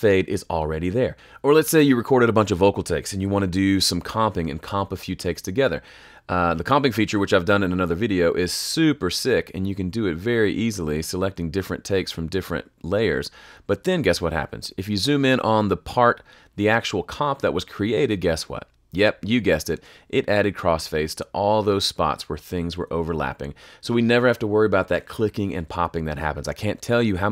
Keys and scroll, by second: 1.1 BackSpace.